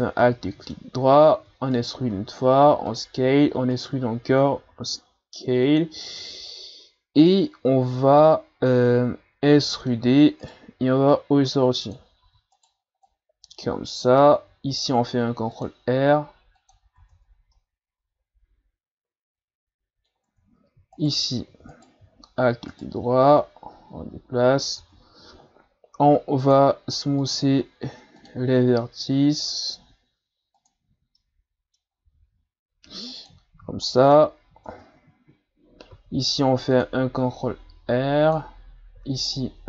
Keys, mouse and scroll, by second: 0.2-1.4 middle drag, 1.4 e, 2.1 s, 3.1 e, 4.6 s, 8.2-10.0 middle drag, 10.0 e, 11.1-12.2 drag, 12.2 e, 13.1-14.7 drag, 14.7 ctrl+r, 17.0 Tab, 17.3 scroll down 2, 17.5-20.3 middle drag, 20.3 Tab, 20.9 alt+right click, 21.7 alt+right click, 22.4 e, 23.4-24.8 drag, 24.8 Tab, 26.5 click, 27.2-30.2 drag, 30.6-31.2 drag, 31.2-31.9 middle drag, 31.9-32.7 scroll up 2, 32.7 w, 33.9 middle click, 34.7 Tab, 35.9 ctrl+r.